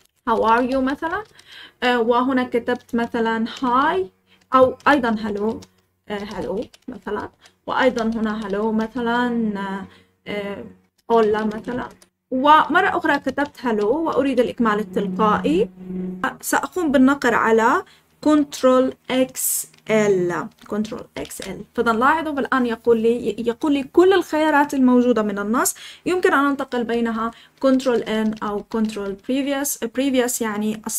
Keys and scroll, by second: 0.0-8.9 typing, 10.7-14.8 typing, 21.1 ctrl+x, 21.2 ctrl+l, 27.1 ctrl+n, 27.5 ctrl+n, 27.8 ctrl+n, 28.0-29.4 ctrl+n.